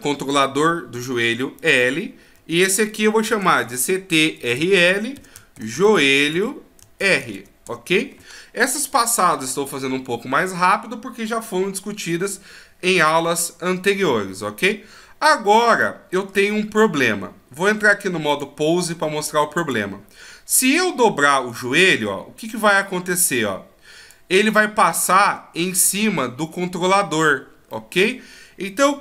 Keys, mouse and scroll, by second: 0.3 right click, 1.6 click, 14.7 middle click, 16.6-17.0 scroll down 1, 18.3 click, 20.6 right click, 21.5 click, 24.5 middle click, 27.7 middle click, 28.8 KP_1.